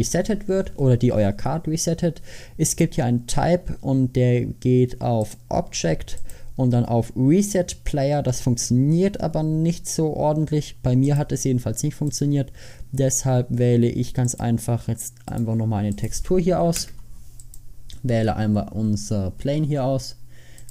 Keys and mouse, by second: 2.8-13.2 drag, 16.9 Tab.